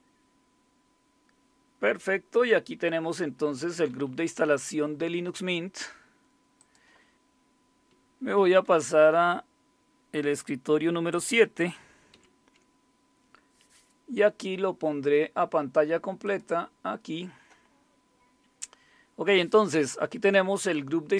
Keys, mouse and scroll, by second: 2.8 Down, 2.9 Down, 3.1 Down, 3.3 Down, 3.6 Down, 3.9 Up, 4.1 Up, 4.2 Up, 4.5 Up, 4.6 Up, 6.2-6.6 scroll down 5, 6.6 click, 8.6 super+-, 8.8 scroll down 5, 12.1 shift+super+/, 16.2 click.